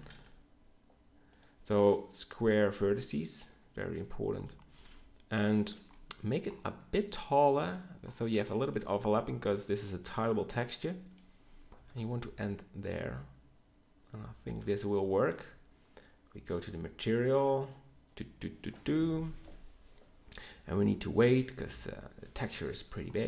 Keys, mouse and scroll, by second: 4.6 g, 11.7 g, 15.3 Tab.